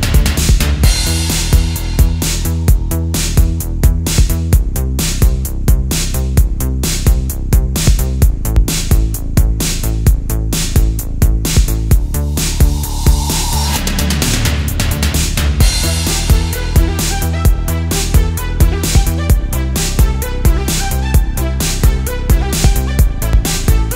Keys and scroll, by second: 0.9 space, 2.0 super+space, 3.9 space, 4.6 super+z, 13.4 space, 14.1 alt+super+space, 15.2 space, 16.2 space, 16.9 space, 18.6 space, 19.2 super+space, 19.8 space, 21.9 space, 22.6 space, 23.3 space.